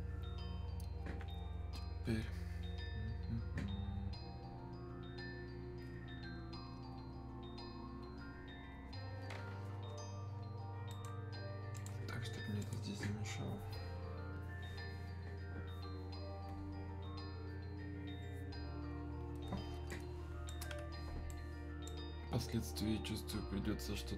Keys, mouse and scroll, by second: 7.4-10.9 right drag, 11.7 click, 19.9-21.3 right drag, 21.3-24.1 alt+right drag.